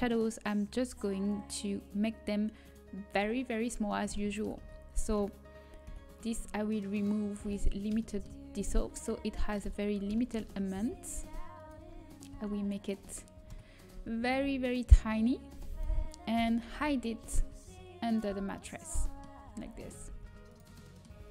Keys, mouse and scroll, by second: 1.8-3.0 drag, 2.6 right click, 3.0 Tab, 3.2-4.7 drag, 4.7 a, 6.9 Delete, 7.7-9.7 middle drag, 8.5 s, 10.7 s, 12.2 s, 13.5 KP_7, 13.9 z, 15.4 s, 16.3 KP_1, 17.1 z, 17.1 g, 18.2 z, 19.5 z, 20.0 g.